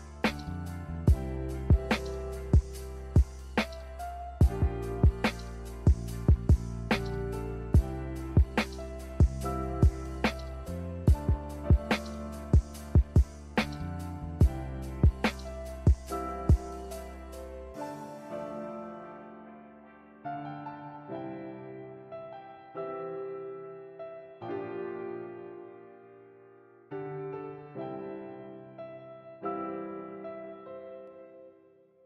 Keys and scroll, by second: 0.0-0.7 typing, 2.4 a, 9.3-10.9 typing, 16.6 a, 20.0 b, 21.2 Delete, 21.7 Delete, 22.4 n, 24.3-25.0 typing, 26.4 z, 29.4 n, 30.6 a.